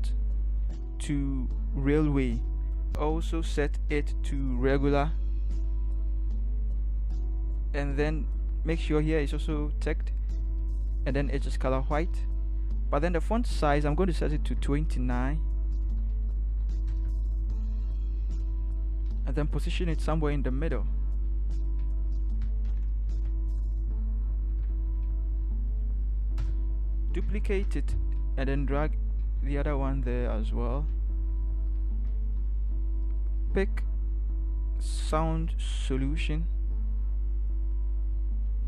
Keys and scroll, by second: 23.1 F2, 24.6 shift+Right, 24.7 shift+Right, 24.9 shift+Right, 25.0 shift+Right, 25.2 shift+Right, 25.4 shift+Right, 26.4 shift+Right, 27.5 ctrl+j, 28.2 shift+Right, 29.2 shift+Right, 29.5 shift+Right, 29.7 shift+Right, 30.0 shift+Right, 30.1 shift+Right, 35.9 ctrl+c, 38.5 ctrl+v.